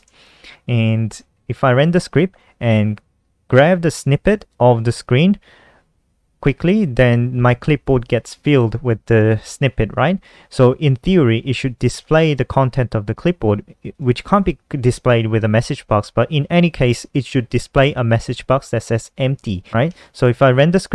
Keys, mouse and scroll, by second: 0.6-3.0 typing, 4.0 click, 4.9 click, 12.0-12.7 typing, 16.1 click, 17.1 click, 18.0 click, 18.9 F5, 20.2 click.